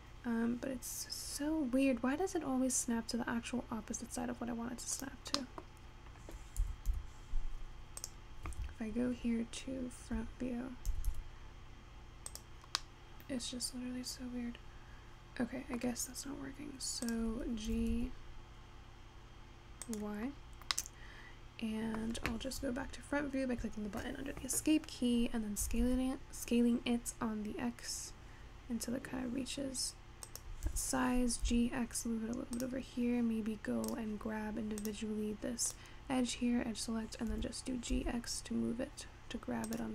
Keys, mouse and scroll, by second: 5.4 scroll down 1, 6.0-7.0 scroll up 3, 7.0 g, 8.7 Tab, 11.0 g, 12.7 scroll down 1, 12.9-16.0 middle drag, 17.1 click, 17.8 g, 20.4 scroll down 1, 20.4-20.9 scroll up 5, 20.9-22.1 middle drag, 22.1 scroll down 2, 25.7 s, 30.7 g, 34.0 click, 34.8 click, 35.8 click, 36.4-37.4 scroll up 1, 37.4 g.